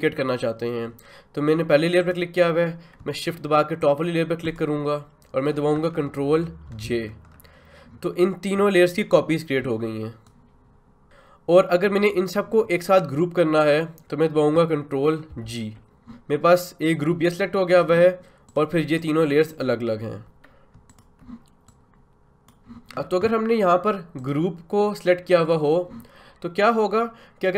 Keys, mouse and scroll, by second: 2.0 click, 4.4 shift+click, 6.7 ctrl+j, 10.3-15.3 drag, 15.3 ctrl+g, 15.8-16.8 drag, 16.8-22.9 drag.